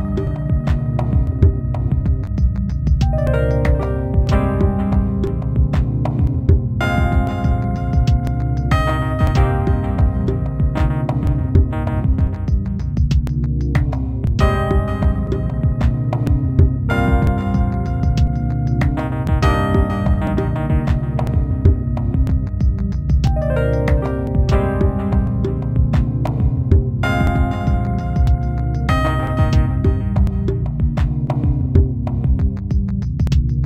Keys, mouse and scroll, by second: 0.3-0.6 scroll down 2, 1.4 b, 5.0 b, 14.5 b, 20.0 b, 22.2 KP_Divide, 22.2 Tab, 22.2 right click, 22.2 scroll up 3, 22.3 middle click, 22.5 KP_1, 22.9 scroll down 2, 23.8 alt+right click, 24.4 middle click, 26.0-26.3 scroll down 4, 26.6 middle click, 28.0 middle click, 28.8 KP_1, 29.2 Tab, 29.5-30.2 scroll up 3, 29.7 Tab, 31.8 alt+shift+right click, 33.3 alt+shift+right click.